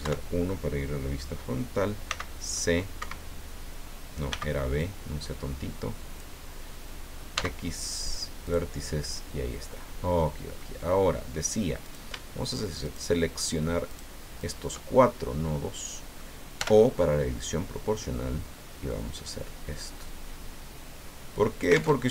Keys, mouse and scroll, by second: 0.0 KP_1, 2.1 c, 3.0 Escape, 4.3 b, 4.8-6.4 drag, 7.4 x, 8.5 click, 10.2 middle click, 10.9-11.2 scroll up 1, 11.9 right click, 12.8 shift+right click, 13.9 shift+right click, 14.4 shift+right click, 15.0-16.4 shift+middle drag, 16.6 o, 18.0 click, 18.8-19.4 scroll down 3, 19.9-20.6 scroll down 2, 22.0 alt+Tab.